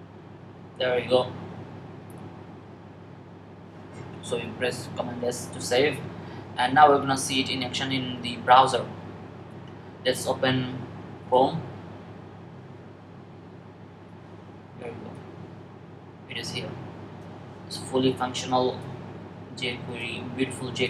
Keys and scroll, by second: 4.9 super+s.